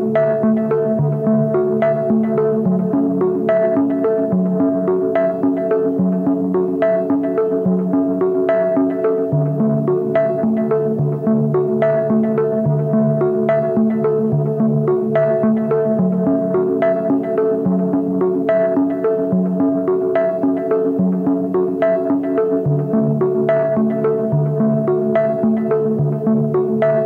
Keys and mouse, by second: 0.8 Tab, 1.3 shift+drag, 2.2 Tab, 2.5 a, 3.0 a, 4.6 click, 5.6 s, 6.9-8.7 drag, 8.9 s, 9.9-11.6 drag, 12.0 click, 13.5-14.7 drag, 15.1 Tab, 15.4 a, 15.7 ctrl+s, 15.8-17.7 drag, 19.0-20.2 drag, 20.6-20.9 drag, 21.2 a, 21.5 ctrl+s, 21.7-22.4 drag, 23.9 KP_3, 24.5 z, 24.8 shift+click, 25.8 shift+drag, 26.5 KP_Divide.